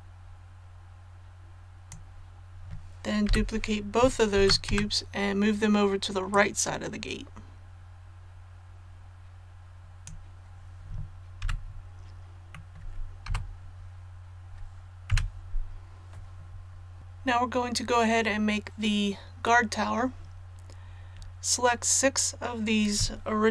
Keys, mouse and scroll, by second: 4.4 shift+d, 6.3-10.8 drag, 11.4 a, 12.5 middle click, 13.3 KP_7, 15.1 KP_1, 17.0 a.